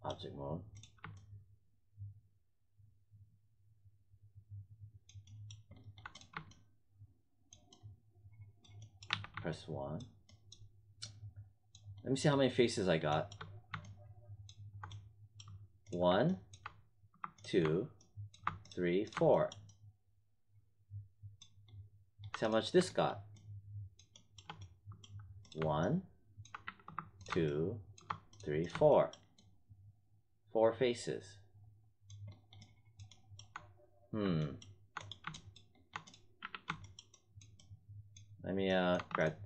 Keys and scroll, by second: 9.0 1, 26.6 w, 36.4 w.